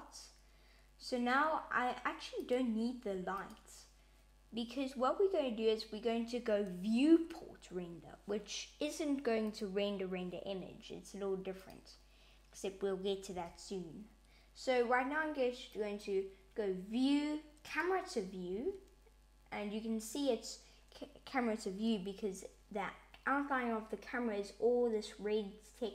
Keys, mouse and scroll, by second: 2.2 click, 3.0 x, 9.3 click, 11.5 click, 13.1 n, 15.5 click, 17.5 click, 18.3 n.